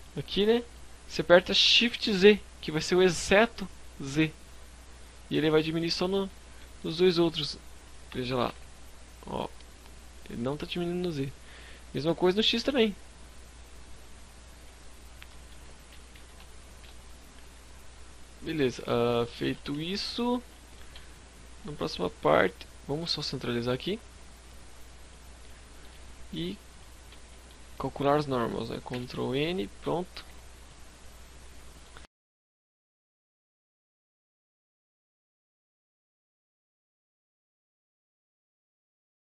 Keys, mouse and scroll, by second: 5.1 right click, 5.3 middle click, 5.6 z, 5.8 middle click, 7.1 s, 13.7 right click, 13.9-14.4 scroll down 2, 14.2 middle click, 14.5 scroll up 1, 15.2 KP_3, 15.4 KP_5, 15.6 z, 15.8 KP_5, 17.2-17.6 scroll down 4, 17.5 z, 17.8 middle click, 18.7 KP_5, 19.0 a, 19.5 middle click, 19.5 scroll up 1, 19.9 Tab, 20.2 scroll down 2, 20.6 middle click, 22.7 click, 24.4 scroll up 1, 24.5 middle click, 25.7 click, 26.1 Tab, 26.3 middle click, 26.3 scroll up 1, 26.6 a, 28.0 ctrl+n, 28.9 Tab, 29.1 a, 29.3 scroll down 4, 29.6 middle click.